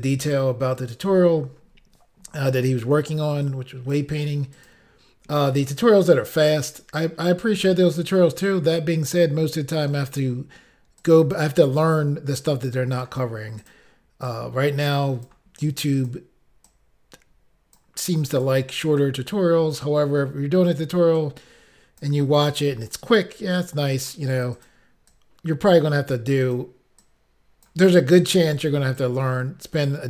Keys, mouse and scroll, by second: 0.0 click, 2.7 click, 2.9 click, 3.5 click, 4.6 click, 4.7 click, 10.1 click, 10.2 click, 11.0 click, 12.5 click, 13.7 click, 13.8 click, 14.3 click, 16.0 click, 16.1 click, 18.4 click, 18.5 click, 19.1 click, 21.2 click, 22.9 click, 23.0 click, 23.6 click, 24.6 click, 24.7 click, 25.2 click, 26.5 click, 26.6 click, 27.1 click, 28.3 click, 28.4 click, 29.0 click.